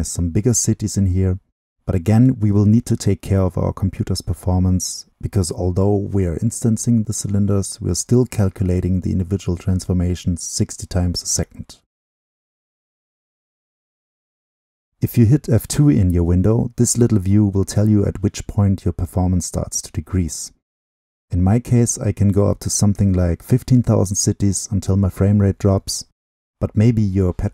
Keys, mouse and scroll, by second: 7.0-8.9 drag, 8.9-10.9 middle drag, 10.9-13.6 drag.